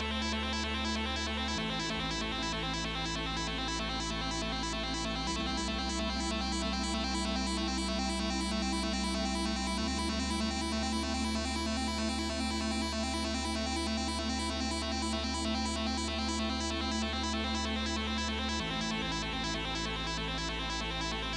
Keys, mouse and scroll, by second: 2.7 double click, 3.2-4.6 drag, 8.8 BackSpace, 8.9 Return, 10.9-11.9 typing, 11.9 Return.